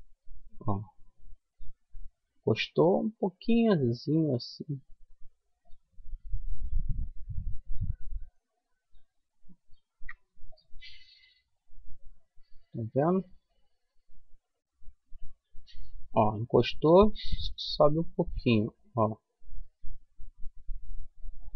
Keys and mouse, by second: 5.6-6.9 middle drag, 7.2-9.0 middle drag, 9.0 ctrl+r, 21.0-21.5 middle drag.